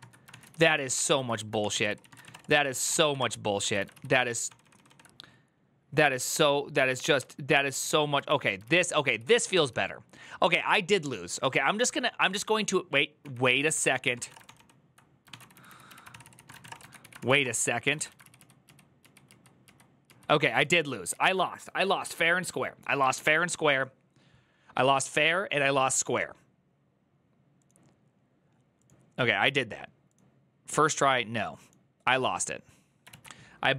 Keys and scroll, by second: 0.0-3.6 typing, 3.4 ctrl+a, 3.7 ctrl+u, 3.9 ctrl+u, 4.6 ctrl+d, 5.8 ctrl+u, 6.1 ctrl+u, 6.8 ctrl+u, 9.4-10.5 typing, 13.0-16.8 typing, 13.3 ctrl+a, 13.7 ctrl+c, 16.9 ctrl+c, 17.1 Up, 17.2 Return, 17.7 ctrl+a, 17.9 [, 18.0 ctrl+u, 18.1 ctrl+u, 18.8 ctrl+u, 23.0 ctrl+u, 23.0 alt++, 32.9 alt+{.